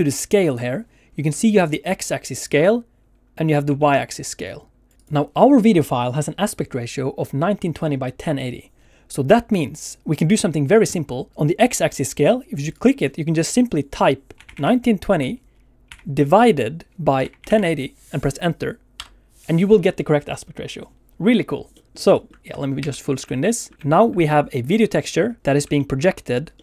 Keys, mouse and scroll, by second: 1.1 scroll up 2, 1.4 shift+middle click, 2.4 click, 3.7 ctrl+z, 4.1 click, 4.9 click, 5.0 click, 11.3 click, 12.7 click, 21.7 middle click, 22.1 shift+middle click, 22.4 alt+a, 22.4 click, 22.4 scroll down 1.